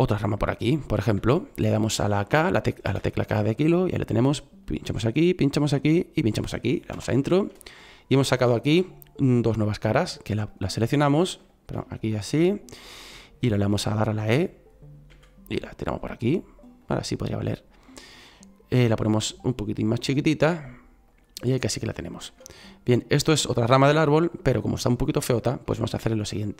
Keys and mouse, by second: 2.8 k, 12.4 middle click, 15.0 e, 18.9 s, 22.7 middle click.